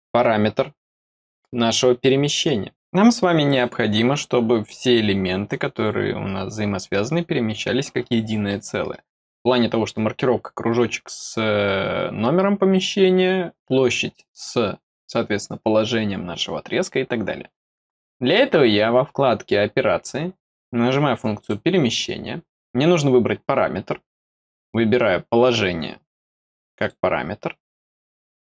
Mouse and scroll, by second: 0.6 scroll down 2, 1.1 middle click, 21.3 click, 26.7 click.